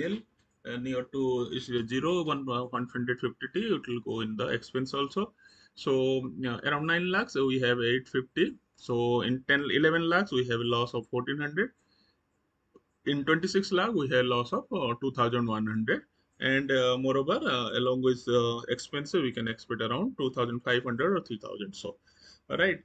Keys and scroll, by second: 4.9 Right, 8.1 Right, 11.5 Right.